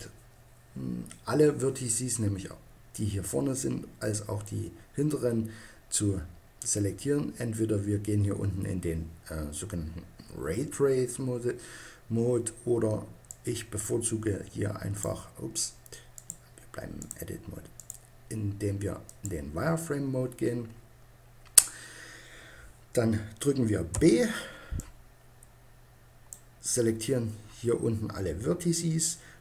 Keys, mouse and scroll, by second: 12.9 middle click, 14.9 typing, 16.0 click, 16.6 click, 17.1 middle click, 17.6-19.4 drag, 23.8 b.